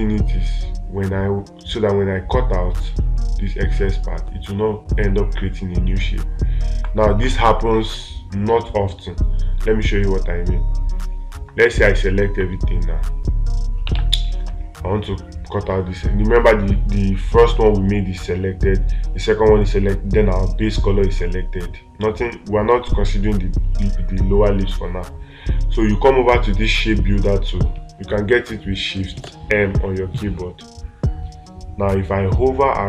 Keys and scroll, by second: 14.4 space.